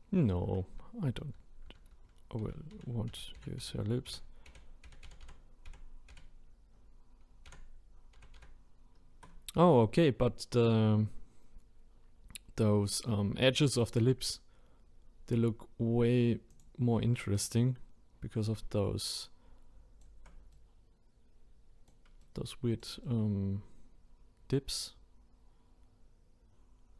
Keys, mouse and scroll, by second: 1.7 ctrl+z, 1.9-3.4 ctrl+z, 3.6-5.0 ctrl+z, 5.2 ctrl+z, 7.5 ctrl+z, 8.2 ctrl+z, 19.8-26.2 shift+right drag.